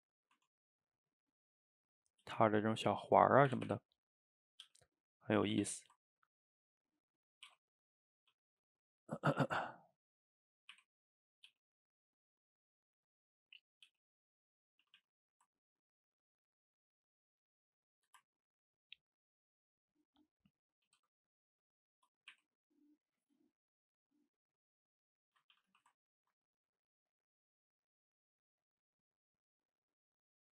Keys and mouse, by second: 0.4 Tab, 0.8-2.3 middle drag, 2.3 g, 2.8-3.5 middle drag, 3.5 r, 4.7 g, 5.5 a, 5.7 a, 6.0-7.2 ctrl+middle drag, 7.2 drag, 7.5 r, 8.4 g, 9.4 shift+d, 10.8 r, 11.6 g, 12.0-13.9 middle drag, 13.9 g, 14.8 a, 15.0 a, 15.2-16.8 middle drag, 16.8 click, 17.0-17.9 middle drag, 17.9 shift+right click, 18.2-18.9 ctrl+middle drag, 18.9 drag, 19.4-20.9 middle drag, 20.9 alt+d, 22.0-22.4 middle drag, 22.4 r, 23.1-24.1 middle drag, 24.1-25.6 shift+drag, 25.6 a, 25.7 a, 26.1-28.9 ctrl+middle drag, 28.9 drag, 29.2-30.5 middle drag.